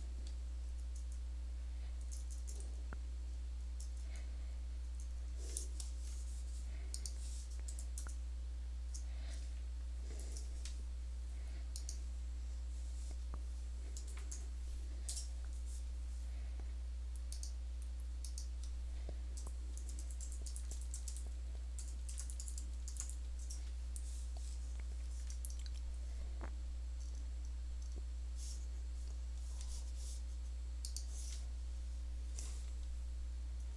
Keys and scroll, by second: 0.8 super+Tab, 1.8 super+Tab, 2.1 super+Tab, 2.3 super+Tab, 2.4 super+Tab, 3.8 super+Tab, 4.7-10.5 super+Tab, 7.6 super+c, 7.8 Tab, 10.1 super+n, 13.8-14.2 typing, 19.2-22.9 typing.